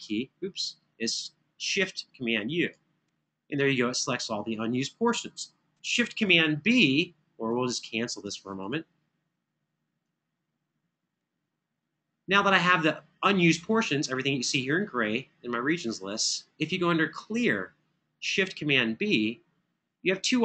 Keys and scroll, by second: 6.0 super+b.